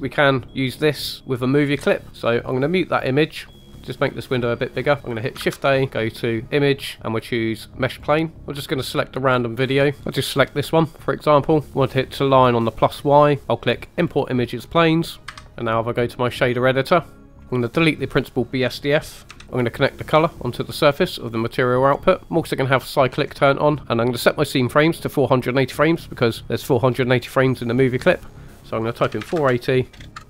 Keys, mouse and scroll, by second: 1.0 click, 4.0 click, 4.0 middle click, 4.0 scroll down 2, 5.6 shift+a, 15.3 KP_1, 15.5 click, 15.5 scroll down 2, 15.5 space, 17.0 click, 17.4 middle click, 17.4 scroll down 3, 17.5 click, 19.4 right click, 20.3 click, 21.9 middle click, 22.7 click, 28.2-30.2 drag, 30.0 BackSpace.